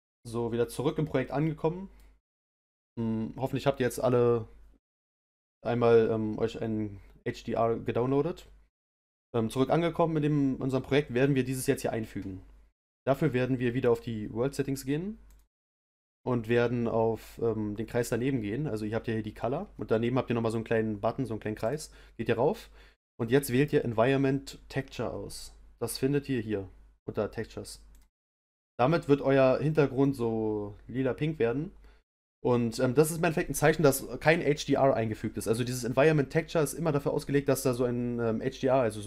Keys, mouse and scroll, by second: 0.6-1.1 scroll down 1, 1.1-28.0 middle drag, 30.0-39.0 middle drag.